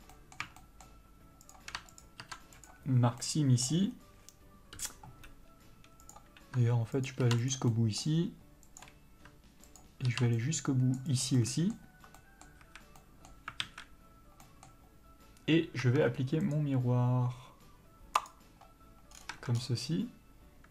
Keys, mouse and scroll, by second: 0.5 shift+middle click, 1.5 shift+click, 1.9 ctrl+click, 2.6 ctrl+e, 3.1 middle click, 3.9-6.0 scroll down 1, 6.0 click, 7.0 ctrl+click, 7.4 ctrl+e, 7.7 middle click, 8.6 click, 9.7 ctrl+click, 11.1 ctrl+e, 11.3 middle click, 12.6 a, 12.9 middle click, 13.6 alt+a, 14.4 middle click, 15.8 Tab, 18.2 click, 19.1 scroll down 1, 19.3 Tab, 19.5-20.7 scroll up 1.